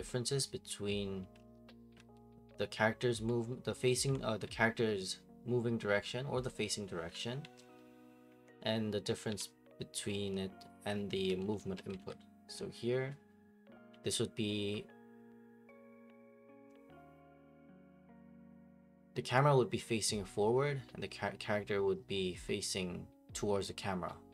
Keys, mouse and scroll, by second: 0.0-2.7 typing, 3.8-5.3 typing, 6.8-12.5 typing.